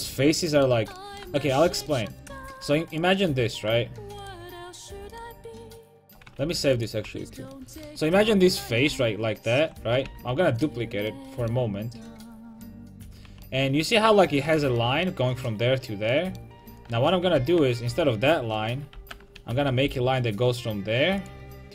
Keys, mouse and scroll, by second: 2.4 Tab, 2.6 Tab, 2.9 right click, 6.0 right click, 6.4 ctrl+s, 8.9 ctrl+d, 10.1 shift+d, 12.7-14.5 drag, 13.3 a, 14.5-16.3 right drag, 16.3 middle click, 16.9 a, 17.4 l, 19.0 alt+j, 19.4 a, 19.9 k.